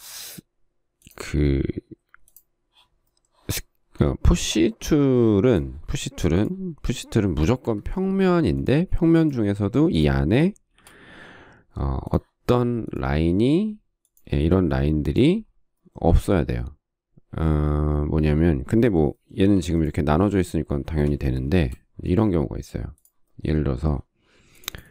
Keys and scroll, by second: 7.8 Escape, 10.0 space, 10.9 shift+r, 14.5 space, 19.8 p, 21.3 Escape, 21.7 space.